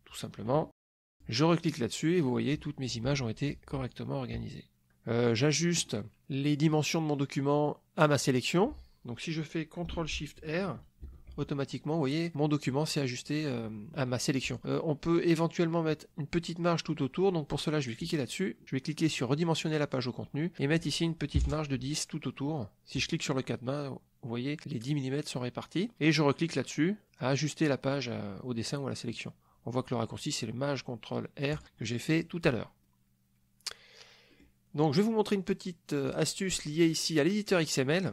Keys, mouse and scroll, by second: 1.1 click, 2.1 click, 4.0-5.7 ctrl+drag, 11.2 ctrl+shift+r, 18.0 click, 19.6 click, 20.6 click, 21.3 KP_1, 21.9 KP_0, 22.9 click, 31.5 click, 34.4 middle drag, 36.0 click, 37.5 click.